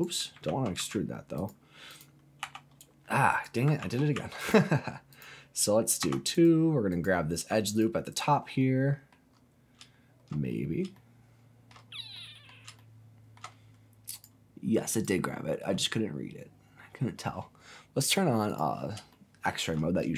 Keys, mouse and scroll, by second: 0.5 ctrl+z, 0.8 ctrl+z, 1.4 click, 1.9 click, 2.4 e, 2.8 2, 3.3 right click, 3.8 ctrl+z, 4.1 ctrl+z, 4.4 click, 5.1 click, 6.0 2, 6.3 click, 6.9 click, 7.7 alt+click, 8.6 middle click, 9.3 scroll up 2, 9.9-10.8 shift+scroll down 5, 10.9 shift+middle click, 11.9 scroll up 1, 12.1 middle click, 12.5 scroll down 1, 12.8 shift+middle click, 14.1 click, 14.9 alt+click, 16.5-17.1 scroll up 2, 18.5 click, 19.1 shift+middle click.